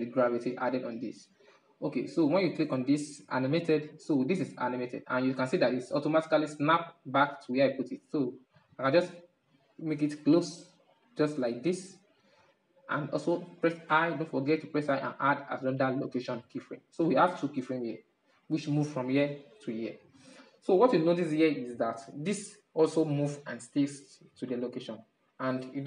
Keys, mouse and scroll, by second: 1.6 click, 6.5-8.5 drag, 8.5-9.2 middle drag, 9.2-10.4 drag, 10.4 middle click, 10.6-11.2 scroll down 1, 11.2-12.2 middle drag, 14.6 i, 16.5-20.0 drag, 20.0-21.8 middle drag, 21.8-24.7 drag, 24.7-25.8 middle drag.